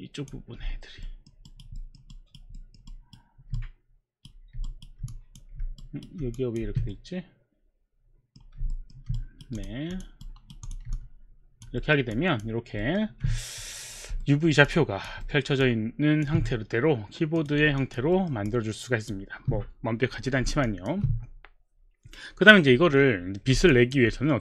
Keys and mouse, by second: 0.0 click, 1.0 alt+middle click, 1.5 alt+right click, 1.8 alt+middle click, 2.0 alt+middle click, 2.0 alt+right click, 2.1 alt+right click, 2.6 alt+middle click, 2.9 alt+right click, 3.8 right click, 4.7 alt+right click, 5.1 click, 5.7 alt+right click, 6.6 click, 6.6 alt+right click, 6.6 w, 6.9 middle click, 8.7 alt+middle click, 9.2 right click, 9.2 alt+middle click, 9.9 click, 10.3 right click, 10.3 click, 10.7 click, 10.9 alt+click, 11.8 alt+middle click, 12.1 alt+click, 12.8 alt+middle click, 14.7 alt+click, 15.2 alt+middle click, 15.6 alt+click, 17.4 click, 17.8 alt+click, 18.1 alt+middle click, 18.5 alt+click, 19.0 alt+click, 20.7 alt+click, 23.7 alt+click.